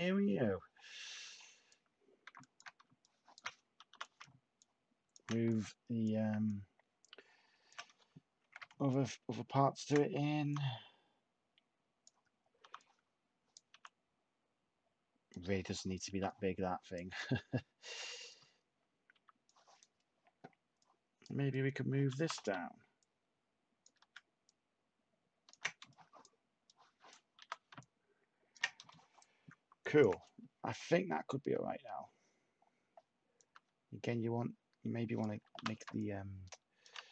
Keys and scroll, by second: 8.4 h, 10.4 t, 12.6 t, 13.6 t, 23.9 ctrl+z, 27.3 t, 35.5 t.